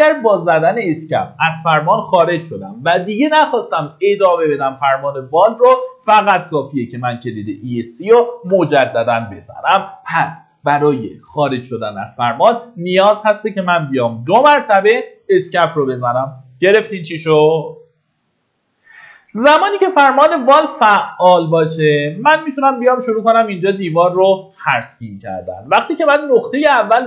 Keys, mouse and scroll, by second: 0.5 Escape, 18.3 middle click, 19.4-20.2 typing, 20.9-21.4 scroll up 1, 26.5-27.0 drag.